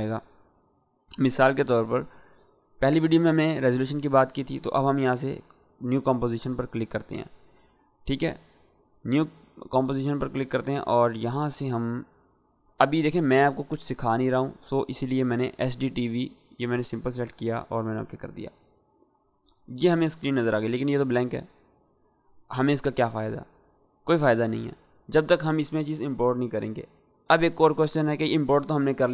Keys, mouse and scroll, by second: 8.3 click, 15.5 click.